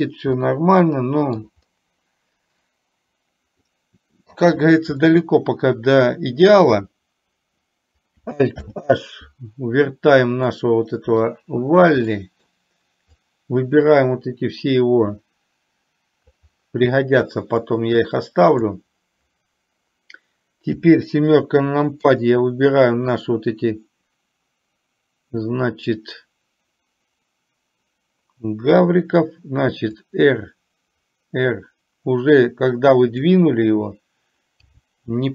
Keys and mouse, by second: 0.4-1.5 middle drag, 3.8-4.4 middle drag, 5.1-6.6 middle drag, 8.8 alt+h, 10.5-11.4 middle drag, 12.3 middle click, 13.4-14.0 drag, 15.3-16.4 drag, 17.9 click, 22.1 click, 30.4-33.4 drag, 34.9 g.